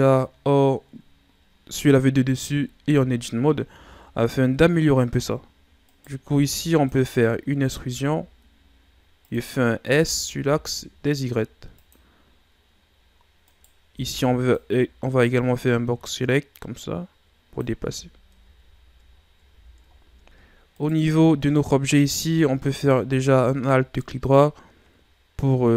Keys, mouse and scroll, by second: 2.4-2.9 ctrl+scroll up 1, 2.9 Tab, 3.2 scroll up 2, 3.7 z, 4.1-4.9 ctrl+scroll up 4, 5.8 right click, 6.2 b, 7.8 e, 13.5 right click, 13.9 b, 15.3-17.7 drag, 17.7 z, 18.3 Tab, 18.7-19.2 scroll down 4, 19.5 a, 19.9 ctrl+scroll down 3, 20.4-20.7 scroll up 1, 20.7 right click, 21.0 Tab, 21.6-22.0 ctrl+scroll down 3, 22.6 alt+right click, 23.9-25.7 drag.